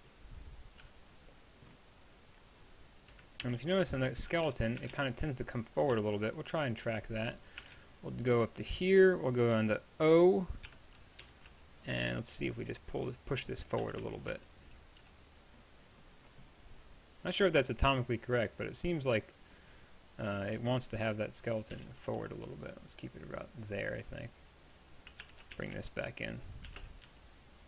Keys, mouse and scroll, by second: 0.0-0.8 typing, 3.1 KP_1, 4.2-5.9 typing, 7.6 a, 9.6 p, 10.7-13.0 drag, 10.7 o, 11.2 g, 13.8 g, 21.8-25.6 drag, 21.8 g, 25.2 o, 25.6 g, 26.7 g.